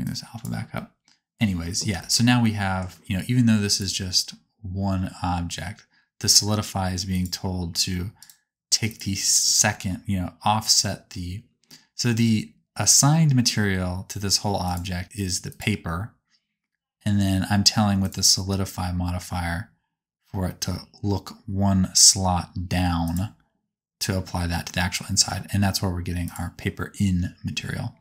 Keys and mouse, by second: 2.1-7.1 middle drag, 7.1-14.7 drag, 14.7 middle click, 15.5 click, 15.6-23.1 middle drag, 23.1 click, 26.2 click.